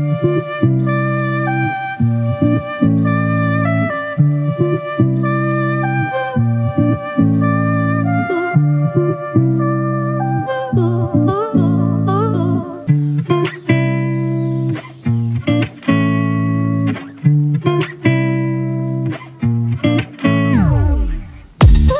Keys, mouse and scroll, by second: 18.5 double click.